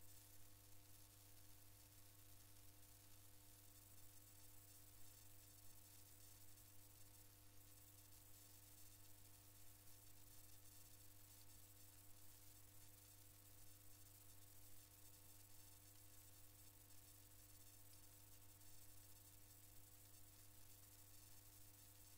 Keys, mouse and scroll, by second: 7.2 click, 9.0-10.2 drag, 11.9 click, 13.1 click, 22.1 click.